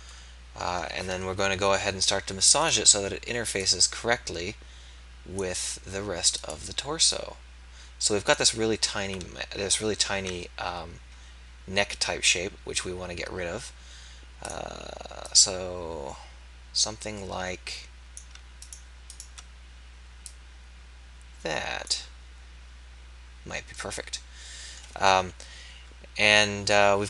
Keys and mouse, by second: 1.4 KP_3, 4.9 click, 9.0 alt+a, 10.1 ctrl+a, 23.9-25.5 drag, 25.8 KP_1.